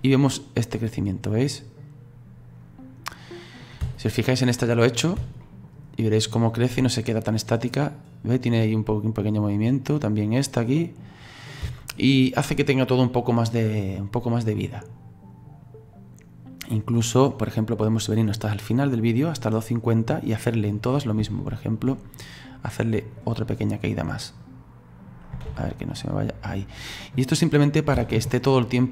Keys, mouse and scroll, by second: 0.1-3.0 middle drag, 3.0 scroll down 2, 3.4 middle click, 3.8 space, 4.9 click, 5.2 space, 5.4 middle click, 5.9-9.0 scroll down 2, 11.6 space, 13.0-16.0 drag, 20.3 middle click, 21.0-21.3 scroll up 1, 21.3-23.1 shift+middle drag, 23.1 click, 24.4-25.5 drag, 25.5 ctrl+z, 26.0-28.0 drag, 28.0 space, 28.4-28.9 middle drag.